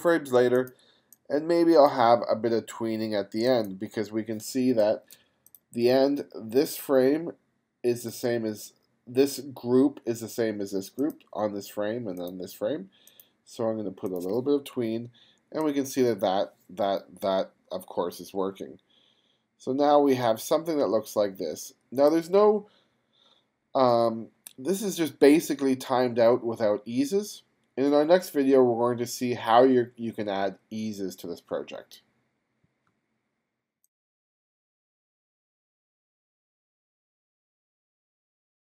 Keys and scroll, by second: 4.7 space, 5.3 space.